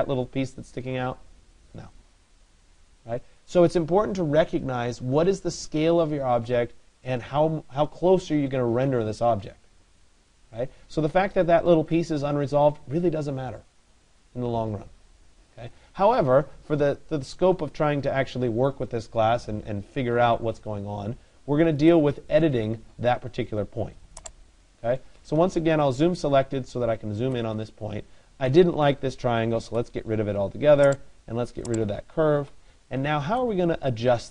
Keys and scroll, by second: 25.1 Return.